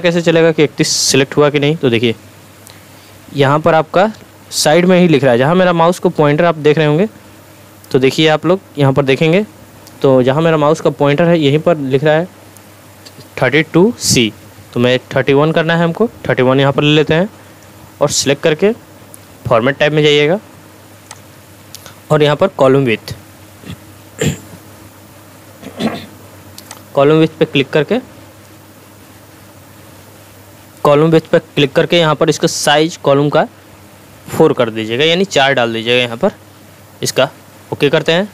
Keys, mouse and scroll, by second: 4.2 click, 21.1 click, 21.2 click, 26.7 click.